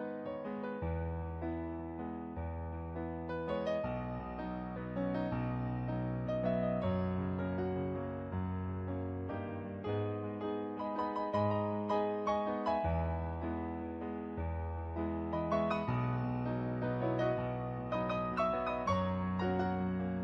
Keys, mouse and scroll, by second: 0.0 ctrl+z, 0.6 ctrl+z, 0.8 ctrl+z, 2.7 ctrl+z, 3.1 ctrl+z, 4.7 ctrl+z, 5.0 ctrl+z, 6.0 ctrl+z, 6.6 ctrl+z, 8.5 ctrl+z, 10.1 ctrl+z, 14.4 ctrl+z, 16.3 ctrl+z, 16.9 ctrl+z, 19.0 ctrl+z, 19.5 ctrl+z, 20.0 ctrl+z.